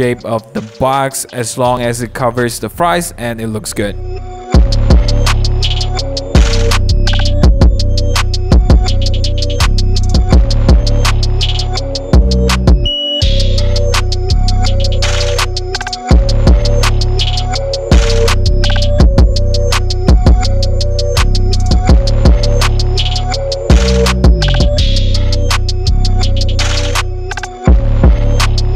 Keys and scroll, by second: 4.8 Return, 5.0 super+1, 5.2 super+0, 5.3 super+t, 6.7 Return, 7.1 super+=, 7.2 super+=, 7.3 super+g, 7.4 super+=, 7.6 p, 9.0 super+z, 9.1 super+z, 10.1 super+0, 10.6 Return, 10.9 super+i, 11.5 super+t, 12.2 Return, 12.3 super+=, 12.5 super+=, 12.5 super+j, 18.8 super+=, 20.0 super+d, 20.1 i, 21.5 super+d, 22.9 super+d, 23.0 i, 23.9 super+d, 24.7 super+t, 25.0 Return, 25.5 super+=, 25.6 p, 26.0 super+z, 27.7 Return, 27.8 alt+BackSpace, 27.8 super+d, 27.9 super+0, 28.0-28.7 typing.